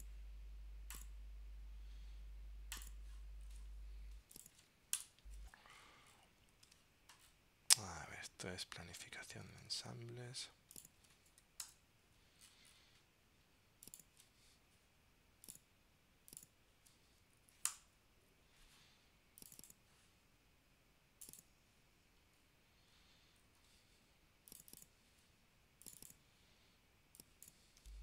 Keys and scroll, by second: 6.8 super+Tab, 9.6 super+Tab, 11.8 super+Return.